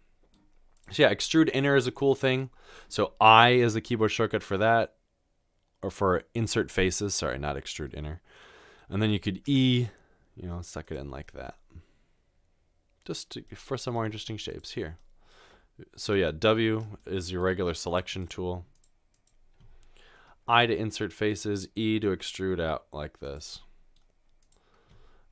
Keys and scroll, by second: 16.1 w, 20.5 typing, 22.1 typing.